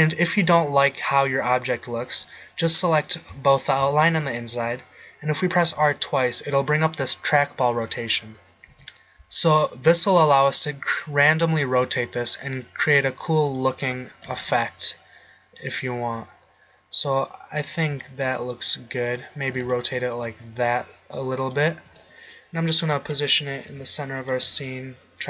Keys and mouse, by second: 5.7 r, 14.3 r, 18.3 r, 19.5 r, 21.9 g, 23.7 s, 24.4 g.